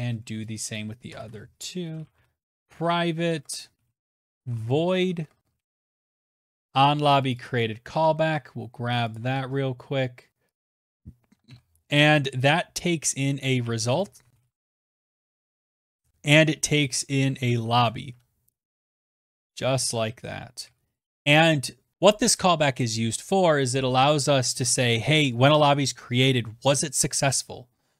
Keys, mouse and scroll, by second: 12.9-20.6 typing, 19.4 Down, 19.4 Left.